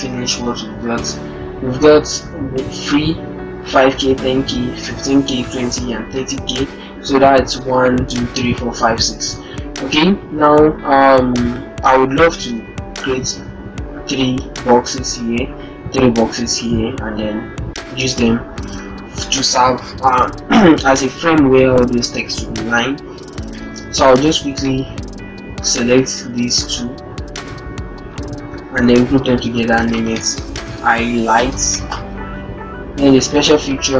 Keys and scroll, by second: 28.2 ctrl+g, 30.2 shift+h.